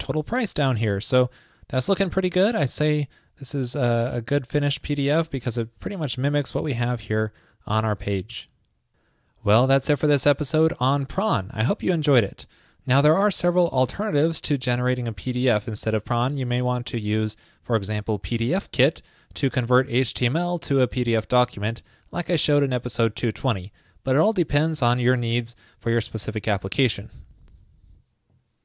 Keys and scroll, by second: 0.7 super+r.